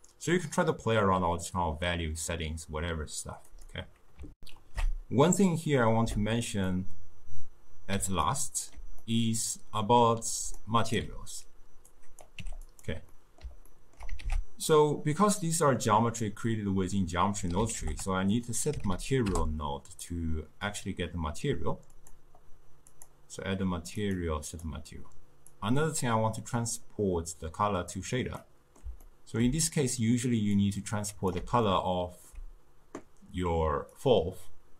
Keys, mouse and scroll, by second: 4.4 ctrl+alt+shift+q, 6.7-10.4 middle drag, 10.4 d, 10.6 right click, 11.1 d, 11.9-12.4 drag, 12.4 g, 13.1-14.3 middle drag, 14.3 ctrl+a, 22.0 click, 23.0-28.4 drag, 28.4-30.6 middle drag, 30.6-31.8 drag, 31.8-34.0 ctrl+middle drag, 34.0 drag.